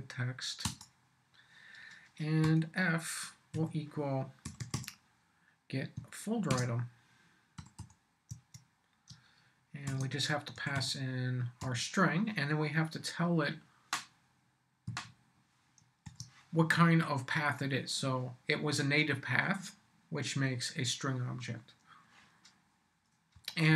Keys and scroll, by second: 0.6 Return, 2.4 f, 3.5-5.2 typing, 6.5-8.3 typing, 8.3 Tab, 9.1 shift+Tab, 9.9 shift+9, 10.5 shift+s, 11.6 ,, 14.9-16.5 typing, 23.3 Up.